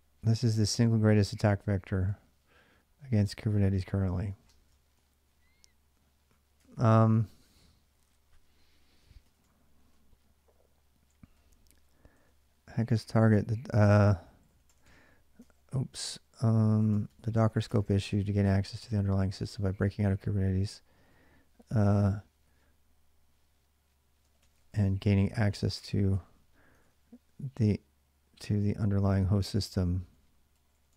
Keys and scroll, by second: 0.6 ctrl+[, 1.9 ctrl+j, 1.9 k, 4.0-6.8 typing, 6.4 ctrl+[, 9.1-22.6 typing, 15.2 ctrl+[, 17.5 ctrl+[, 23.8-25.9 typing, 26.6 ctrl+[, 26.7 ctrl+j, 28.2-30.9 typing.